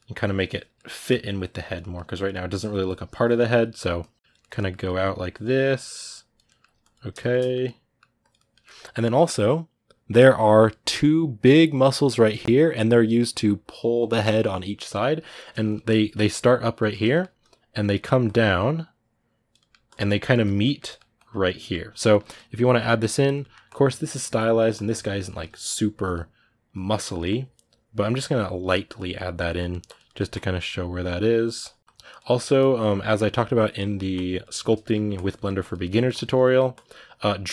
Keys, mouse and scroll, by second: 0.0 click, 0.5 ctrl+middle click, 0.9 click, 1.6 middle click, 1.9 click, 2.1 middle click, 2.4 click, 3.2 ctrl+middle click, 3.8 click, 4.2 ctrl+middle click, 4.6-6.3 drag, 6.3 ctrl+middle click, 6.6 ctrl+click, 7.2 middle click, 8.0 click, 8.1-16.3 ctrl+middle drag, 16.3 click, 16.9 shift+middle click, 17.2 click, 17.7 shift+middle click, 18.0-19.3 drag, 19.3 middle click, 19.6 click, 19.8-20.9 shift+middle drag, 20.9 click, 21.3-22.7 middle drag, 22.7 click, 23.2 middle click, 23.4-25.0 drag, 25.0-26.5 middle drag, 26.5 click, 26.8 middle click, 27.0-29.2 drag, 29.2 middle click, 29.6 click, 29.8 middle click, 30.1-32.0 drag, 32.0 middle click, 32.3-33.6 drag, 33.6 middle click, 33.9 click, 34.3 shift+middle click, 34.9 click, 35.1 middle click, 35.4 click, 35.6 shift+middle click, 35.9 click, 36.2 middle click, 36.5-37.5 drag.